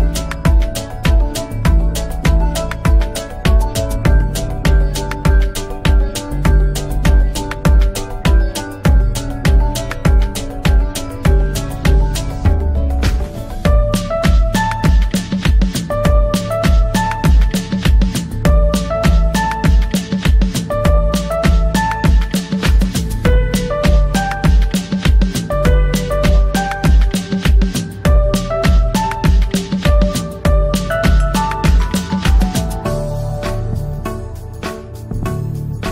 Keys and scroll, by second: 3.1 shift+F2, 3.9 shift+Page_Up, 4.3 F3, 6.0 Escape, 9.1 ctrl+r, 9.9 c, 10.6 c, 11.1 Escape, 11.4 F3, 12.0 Escape, 15.7 Escape, 16.0 F2, 18.1 F2, 23.0 F3, 24.0 Escape, 24.3 F3, 25.6 ctrl+g, 26.2 c, 30.6 c, 31.0 Escape, 32.8 F2, 34.9 F3, 35.1 Escape, 35.5 F2.